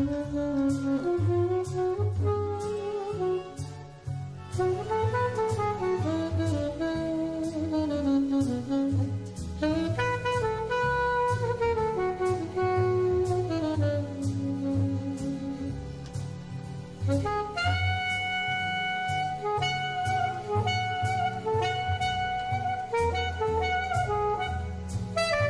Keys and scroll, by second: 2.1 super+space, 6.4 super+j, 7.9 super+z, 8.4 super+c, 9.7 super+f, 15.8 super+z.